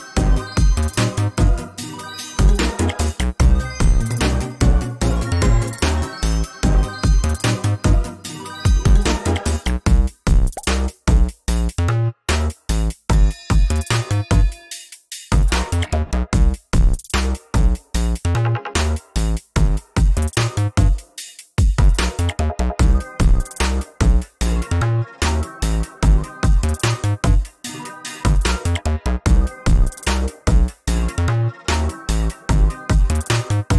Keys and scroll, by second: 3.9 ctrl+space, 17.3 ctrl+a, 17.6 ctrl+space, 18.4 ctrl+a, 22.9 ctrl+space, 24.8 ctrl+a, 27.6 ctrl+a, 30.8 alt+Down, 32.1 alt+Up, 32.6 alt+Down, 33.4 ctrl+z.